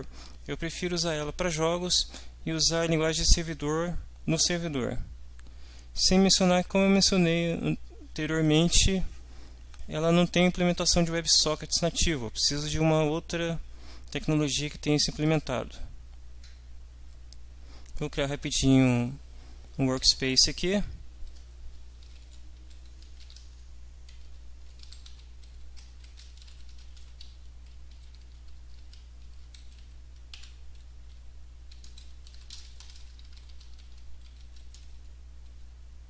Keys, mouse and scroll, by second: 15.2 click, 18.8 click, 21.8-30.3 typing, 30.4 Tab, 31.7-35.1 typing.